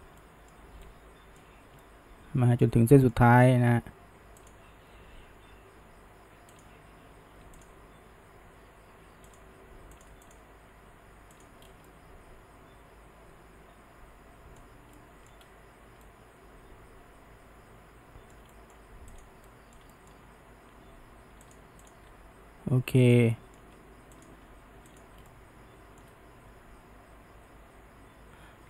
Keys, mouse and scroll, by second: 4.4 drag, 5.0 f, 7.6 click, 8.2 f, 10.0 drag, 10.3 shift+drag, 10.9 f, 11.4 click, 11.6 scroll down 1, 11.9-14.9 middle drag, 15.0-15.4 shift+middle drag, 15.4-16.0 scroll up 1, 16.0-19.2 middle drag, 19.2 click, 19.5-20.2 middle drag, 20.7 g, 21.9 click, 22.1 g, 23.3-24.2 shift+middle drag, 24.2 click, 24.4 g, 25.3-28.3 shift+middle drag.